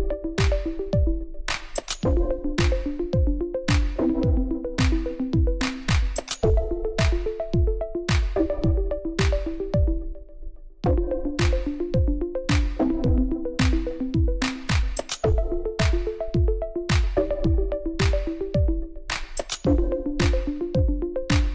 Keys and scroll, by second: 1.0 ctrl+r, 1.5 Return, 2.0 ctrl+b, 8.0 i, 9.3 ctrl++, 13.6 ctrl+z, 14.8 ctrl+z, 16.5 Tab, 17.2 Tab, 18.0 Tab, 21.0 Tab.